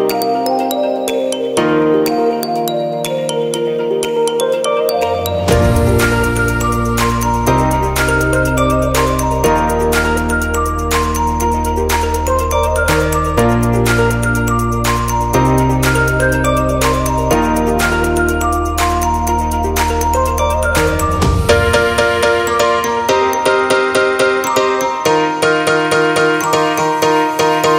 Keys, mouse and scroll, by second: 0.0 click, 4.8-6.5 scroll up 5, 5.1 middle click, 5.8 middle click, 7.4 click, 13.4-14.2 scroll down 1, 14.2 middle click, 14.2-15.1 scroll down 2, 15.8 middle click, 19.0-19.4 scroll down 1, 19.7 middle click, 19.7-20.9 scroll down 4, 20.9 click.